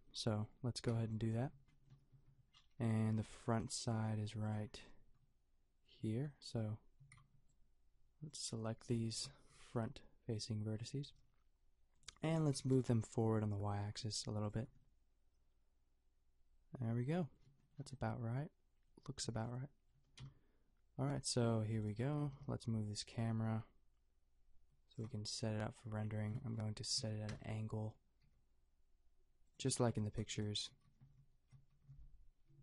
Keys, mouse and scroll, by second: 0.9 b, 2.1 a, 2.8 Tab, 6.0 Tab, 6.6 a, 7.0 a, 7.2 b, 9.1 KP_Decimal, 9.2 KP_5, 11.2 g, 12.6 g, 14.6 Tab, 19.2 a, 20.2 KP_0, 21.7 click, 22.1 shift+f, 22.5 click, 22.7 click, 27.3 ctrl+alt+KP_0, 28.2 g, 29.7 shift+f, 30.9 shift+f.